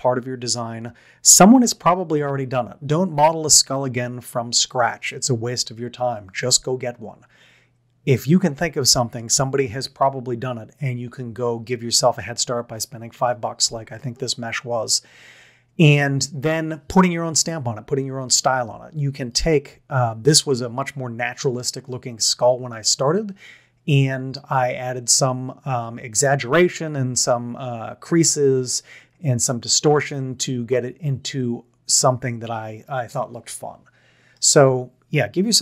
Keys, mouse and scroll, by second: 28.2 middle click, 30.0-31.4 middle drag.